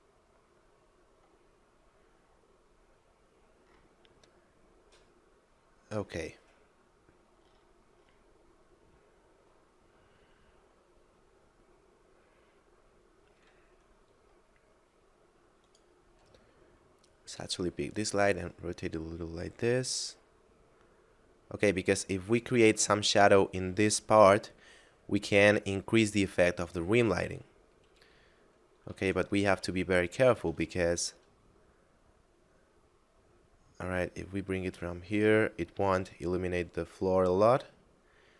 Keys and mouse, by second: 1.7 middle click, 9.0 middle click, 12.3 middle click, 15.5 right click, 17.3 r, 17.4 z, 22.4 click, 29.9 shift+middle click, 30.9 r.